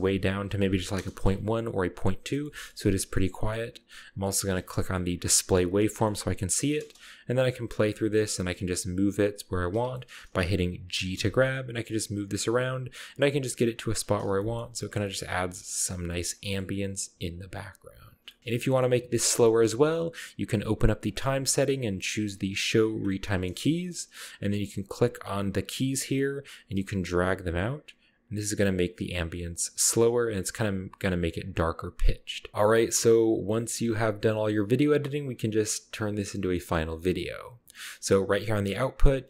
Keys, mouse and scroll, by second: 0.6-1.0 typing, 1.0 Return, 2.3 ctrl+middle click, 5.3 click, 5.9-6.9 ctrl+middle drag, 6.2-6.9 scroll up 1, 6.9 space, 7.3 g, 7.7 click, 8.3-9.0 scroll down 1, 8.5 g, 10.1-10.5 middle drag, 11.3 g, 11.9 click, 12.4 g, 13.1 g, 14.4 ctrl+middle click, 14.6-15.2 ctrl+scroll up 1, 15.4 g, 15.7 ctrl+click, 16.1 ctrl+middle click, 16.3-16.8 ctrl+scroll up 1, 18.3 ctrl+middle click, 18.4 scroll down 1, 18.7-20.5 middle drag, 20.5 drag, 21.0 drag, 22.8 click, 23.3-24.0 scroll down 1, 24.9 click, 26.1-26.9 right drag, 26.9 g, 30.6 g, 31.0-31.8 scroll up 1, 31.8-32.1 middle drag, 32.8 click, 33.9 scroll down 1, 34.6 space, 36.5 middle click, 37.8-38.4 scroll down 1.